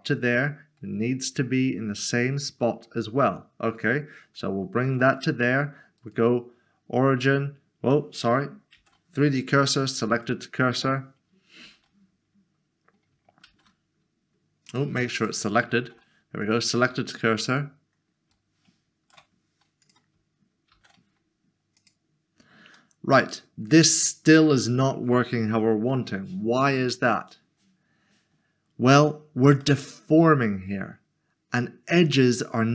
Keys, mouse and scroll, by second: 0.5 scroll up 1, 3.8 shift+right click, 6.0 right click, 8.8 s, 10.1 s, 10.3 click, 11.6 a, 13.5 typing, 14.7 click, 15.2 double click, 15.8 typing, 16.4 click, 18.5 shift+right click, 19.8 click, 20.7 s, 21.8 s, 22.0 click, 22.8 middle click, 27.6 scroll down 1, 29.6 scroll down 1, 29.8 middle click.